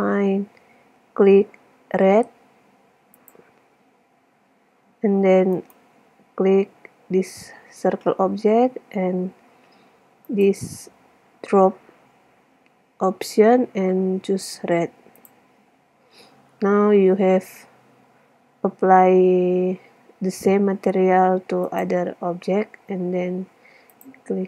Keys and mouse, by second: 5.6-7.9 right drag, 7.9-8.9 middle drag, 21.9-23.8 drag.